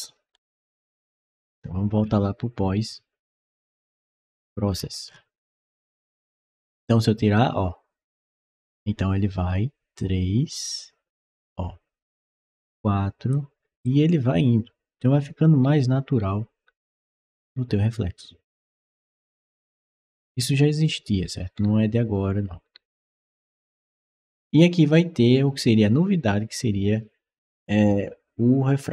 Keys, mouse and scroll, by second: 1.8 middle click, 3.7 click, 4.5 middle click, 4.5-5.7 scroll down 3, 4.9 middle click, 5.2 middle click, 6.5-13.1 drag, 13.7-24.2 right drag, 15.0 s, 16.2 d, 17.2 w, 18.4 d, 19.2 d, 19.7 s, 20.8-23.2 typing.